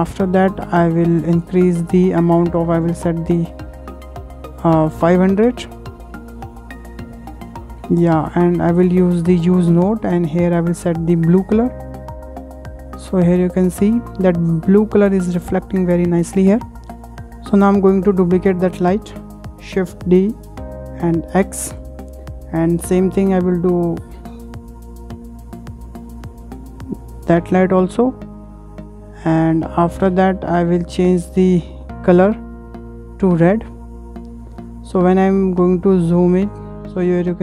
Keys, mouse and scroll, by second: 1.3-3.7 drag, 3.2-6.4 typing, 6.8 Return, 9.4-10.7 drag, 13.1-13.4 scroll up 6, 13.8-16.6 shift+middle drag, 16.6 scroll down 3, 17.0-17.4 shift+middle drag, 17.4 click, 17.4-17.7 scroll up 2, 18.0 shift+middle click, 18.7 click, 19.6 shift+d, 19.8 shift+d, 21.0 x, 22.2-23.6 shift+middle drag, 23.6 click, 26.5-28.6 ctrl+middle drag, 28.6 click, 29.0-29.5 middle drag, 29.5 scroll up 2, 29.8 shift+middle click, 30.2 click, 30.8 drag, 31.2-32.6 middle drag, 32.6 click, 35.2-35.6 scroll up 7, 36.0-36.9 shift+middle drag, 36.9-37.3 scroll up 7.